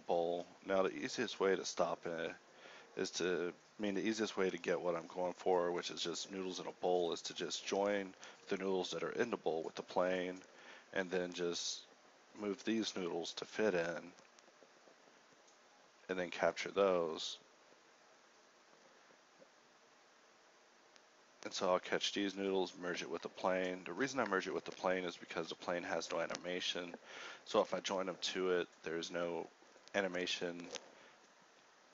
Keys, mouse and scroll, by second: 0.0 a, 1.2 shift+c, 1.9 KP_Decimal, 3.5 shift+a, 4.3 z, 4.5 a, 5.7 b, 6.3 ctrl+j, 6.7 a, 7.6 click, 7.9 z, 8.3 shift+Left, 8.7 a, 10.4 Escape, 10.4-13.1 typing, 14.3 g, 14.3 KP_1, 14.6 alt+a, 18.0-20.1 typing, 21.9 ctrl+j, 23.6 shift+Left, 23.6-25.5 typing, 26.2 alt+h, 26.7 a, 27.6 m, 28.7 1, 29.1 1, 29.3 2, 31.1-31.9 typing.